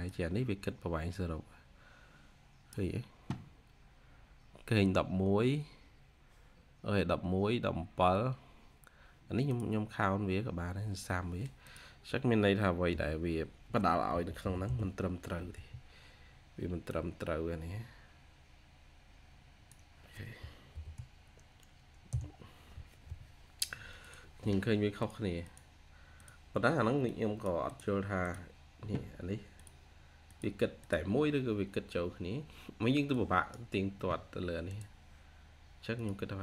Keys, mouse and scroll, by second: 12.8-15.7 typing, 15.4 Tab, 20.6 typing, 21.9 Return, 25.3 double click.